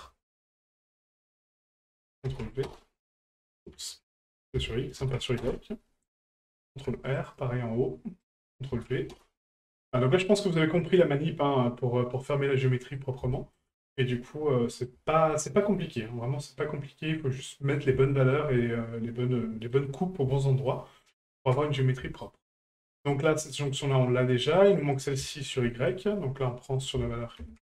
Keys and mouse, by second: 1.9 ctrl+click, 4.4-5.5 drag, 8.4 ctrl+click, 9.9-12.9 middle drag, 13.3 shift+middle drag, 13.8-14.8 middle drag, 15.3-15.6 shift+middle drag, 16.0-16.6 middle drag, 17.4-17.7 middle drag, 18.1 shift+middle click, 18.6-19.7 middle drag, 20.7 shift+middle click, 21.4-21.8 middle drag, 22.2-22.5 shift+middle drag, 23.7 middle click, 24.4 middle click, 24.9 right click, 25.3 shift+middle click, 25.7 middle click, 26.8-27.7 ctrl+drag.